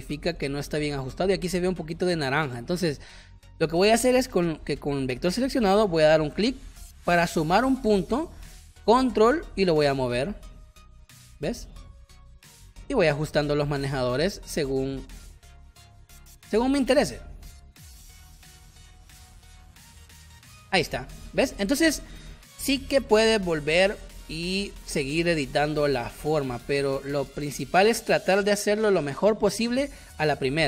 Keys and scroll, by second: 0.4 space, 13.3 space, 16.4 space, 26.1 space, 27.3 space.